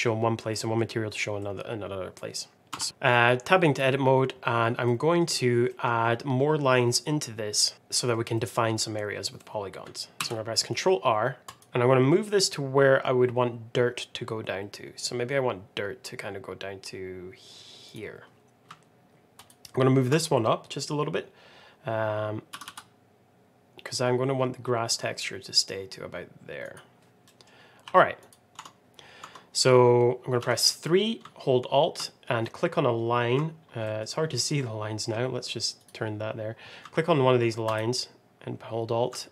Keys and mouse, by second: 2.8 n, 3.0 middle click, 4.9 middle click, 5.6 middle click, 7.7 middle click, 8.2 middle click, 10.1 ctrl+r, 19.4 alt+click, 22.4 g, 27.2 middle click, 27.7 2, 28.2 click, 28.6 Tab, 29.1 Tab, 30.3 3, 32.4 middle click, 33.7 middle click, 35.7 click, 37.6 alt+click.